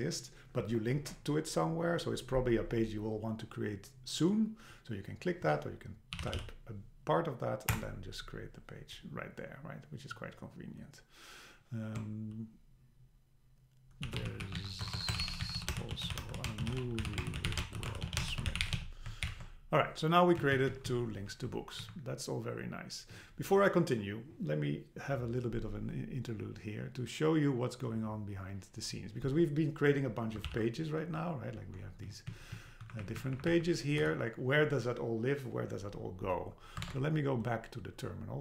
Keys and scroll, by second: 7.7 Return, 14.8 BackSpace, 15.4 BackSpace, 19.2 alt+h, 20.4 Down, 21.1 Down, 21.8 Up, 30.5 super+k, 31.5 Down, 32.9 Up, 34.0 Escape, 36.9 super+Tab.